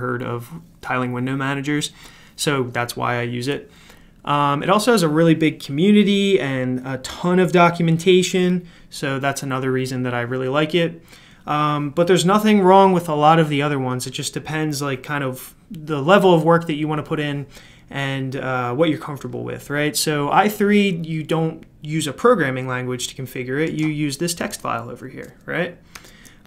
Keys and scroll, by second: 24.5 super+f, 25.9 super+f.